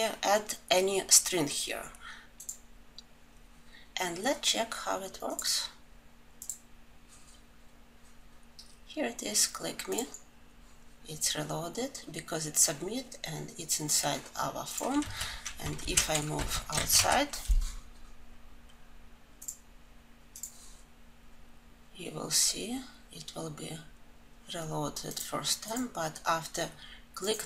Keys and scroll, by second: 16.2 alt+shift+Up, 16.3 ctrl+alt+l.